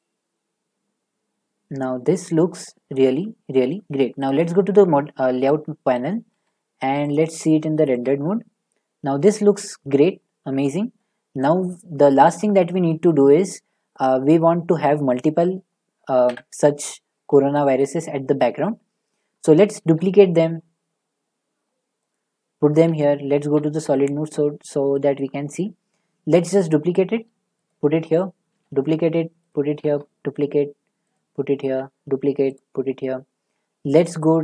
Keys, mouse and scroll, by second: 2.9 click, 2.9 click, 4.2 scroll, 5.4 click, 8.0 click, 8.0 z, 8.2 middle click, 9.5 middle click, 13.1-17.5 middle drag, 17.5 scroll, 22.1-22.5 scroll, 25.2 click, 26.3 z, 27.7-29.0 drag, 28.5 d, 29.5-32.5 drag, 29.8 d, 31.6 d, 34.2 click, 34.2 d.